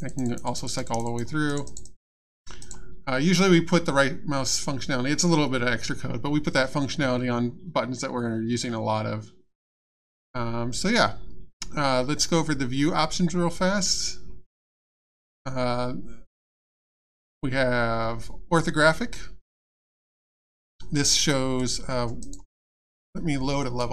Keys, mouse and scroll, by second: 0.2 click, 1.5 right click, 2.6 right click, 21.6 click, 22.2 right click, 23.6 click.